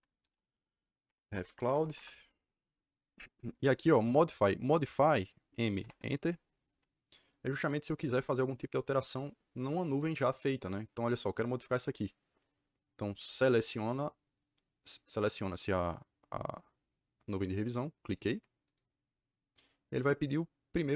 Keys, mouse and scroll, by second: 0.1-2.3 typing, 5.7 m, 5.9 KP_Enter, 18.6 click.